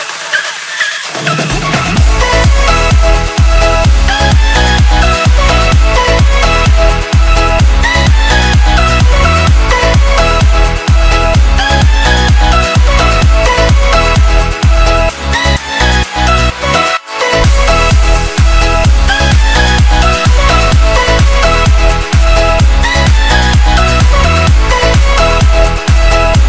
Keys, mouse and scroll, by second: 3.4 right click, 4.7 click, 6.1 Delete, 7.5 click, 11.7 Delete, 15.5 click, 24.1 KP_2, 24.3 KP_4, 25.7 click.